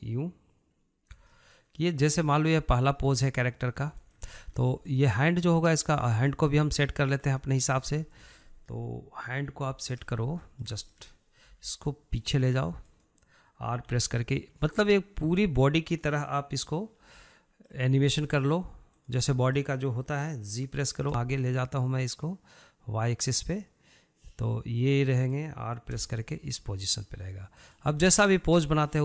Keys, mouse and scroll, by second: 1.6-3.9 shift+middle drag, 3.9-4.2 scroll down 2, 4.2 shift+middle click, 4.5-4.9 scroll up 6, 4.9-6.0 shift+middle drag, 6.0 click, 6.2 scroll down 2, 6.5-8.2 middle drag, 8.2 scroll down 2, 8.5-9.8 shift+middle drag, 9.8 KP_3, 10.2-10.7 scroll up 1, 10.7-11.7 shift+middle drag, 11.7 g, 14.1 r, 16.4-19.2 middle drag, 19.2 drag, 19.5-21.3 shift+middle drag, 21.3 g, 26.3 r, 28.3-29.0 scroll down 4.